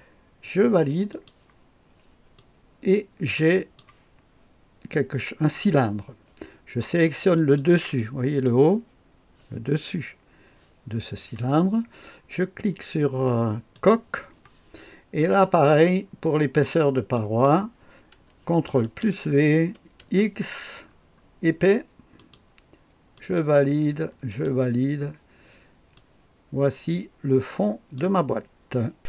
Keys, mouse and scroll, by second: 1.1 click, 2.3-3.8 drag, 7.3-9.0 drag, 13.7 click, 17.1 click, 18.8 ctrl+v, 20.0 x, 20.9-21.6 scroll down 1, 22.2 click, 23.1 click, 24.3 click, 25.9-28.0 drag, 28.9 click.